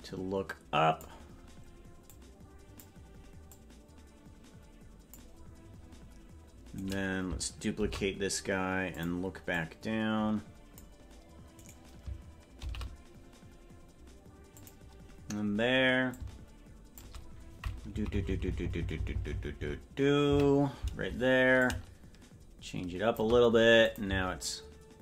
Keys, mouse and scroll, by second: 2.0 click, 3.4-5.1 drag, 6.7-7.7 right drag, 7.7 shift+d, 9.6-10.8 drag, 11.6 right click, 12.6 shift+d, 16.0 click, 18.2 Left, 20.4 Left, 20.4 Right, 21.5-23.2 drag, 23.9 click, 24.0 space.